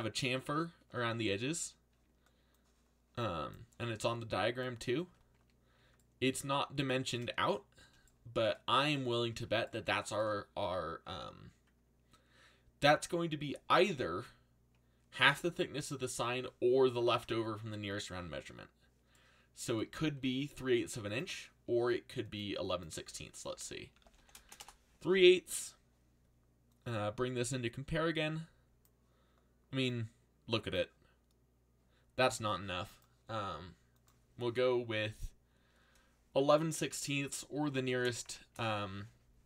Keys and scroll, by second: 20.2 ctrl+b, 23.7-25.0 typing, 37.4-38.7 typing.